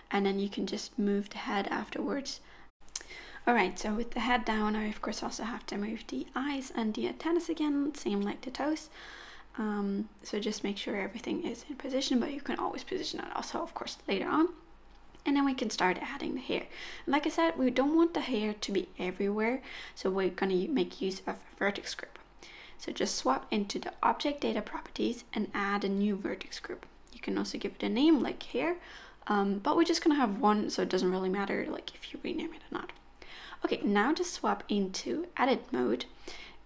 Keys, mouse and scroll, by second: 0.8 g, 3.3 Tab, 3.4 click, 3.6 g, 3.9 z, 4.5 ctrl+z, 4.8 scroll down 7, 5.0 shift+click, 5.3 g, 5.8 middle click, 6.2 click, 6.3 shift+click, 6.5 g, 6.9 middle click, 7.3 middle click, 7.5-8.0 scroll up 4, 7.7 click, 8.1 shift+click, 8.2 shift+click, 8.6 shift+click, 8.7 scroll down 3, 8.9 z, 9.2 g, 9.5-10.2 scroll up 6, 10.2 g, 10.8 middle click, 10.9-11.5 scroll down 4, 11.0 click, 11.1 middle click, 11.5 shift+middle click, 11.7 middle click, 11.9 click, 12.0 middle click, 12.1 scroll up 3, 12.2 shift+middle click, 12.4 shift+click, 12.6 shift+click, 12.9 shift+click, 13.1 shift+click, 13.1 s, 13.4 KP_1, 13.7 KP_3, 14.0 middle click, 14.1 shift+middle click, 14.3 ctrl+KP_7, 14.7 g, 15.0 click, 15.2 shift+click, 15.3 shift+click, 15.5 g, 15.9 middle click, 16.3 g, 16.7 click, 16.8 middle click, 16.9-17.2 scroll down 4, 17.0 shift+middle click, 17.1 middle click, 17.2 shift+middle click, 17.2 shift+scroll up 1, 17.4 click, 17.7 Tab, 17.8 click, 17.8 scroll down 1, 18.1 alt+z, 18.2 click, 18.3 Tab, 18.7 middle click, 19.2 shift+middle click, 22.1 click, 24.0 click, 25.5 click, 25.7 click, 29.0 middle click, 30.1-32.0 scroll down 1, 32.0 middle click, 32.6 click, 33.3 Tab, 33.8 middle click, 34.6-35.6 scroll up 2, 35.6 middle click, 35.6-36.2 scroll up 1, 36.5 middle click.